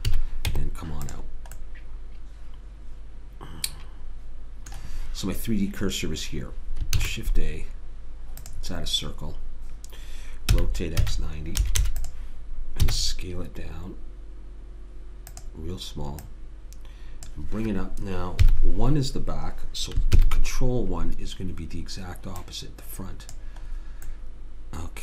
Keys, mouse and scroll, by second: 0.1 a, 0.5 Tab, 1.7 middle click, 7.0 shift+a, 10.5 r, 12.9 s, 16.3 click, 18.4 KP_1, 20.2 ctrl+KP_1, 22.4-23.5 drag, 23.7-25.0 middle drag.